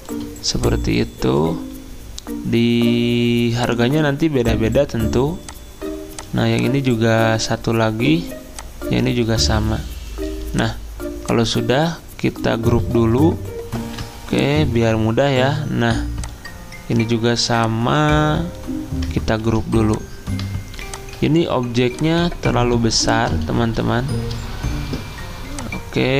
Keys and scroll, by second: 13.8 ctrl+g, 19.4 ctrl+g.